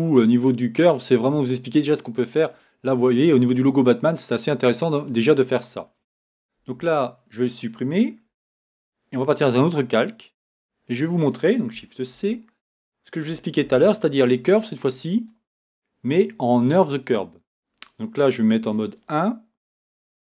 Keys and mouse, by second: 3.0 middle click, 6.7 Tab, 8.4 x, 12.1 shift+c, 13.6 shift+a, 18.6 KP_1.